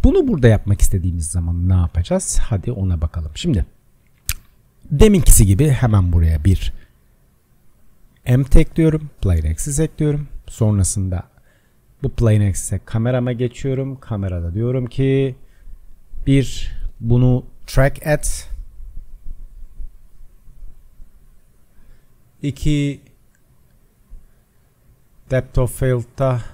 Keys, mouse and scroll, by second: 6.0 shift+a, 9.7 s, 13.7-19.1 drag, 20.0 click, 23.7 click, 25.1-26.5 drag.